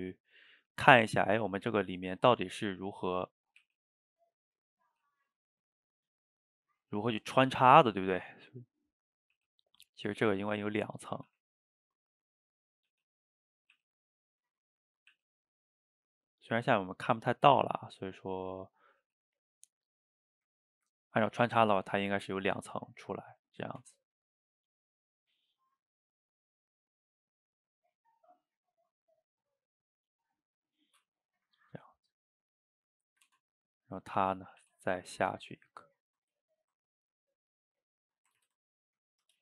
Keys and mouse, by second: 1.2-3.7 middle drag, 3.7 r, 4.9 g, 6.1 click, 11.1 click, 11.3 g, 12.7 click, 12.9 g, 15.1 e, 16.5 click, 16.7 g, 17.5 click, 17.6 g, 18.5 click, 19.1 g, 19.9-23.8 middle drag, 23.8 Tab, 25.7-30.7 shift+drag, 30.7-32.6 middle drag, 32.6 click, 33.0 click, 33.3 Tab, 34.0 click, 34.3-34.6 middle drag, 34.6 e, 38.4 ctrl+z, 38.7-39.4 middle drag.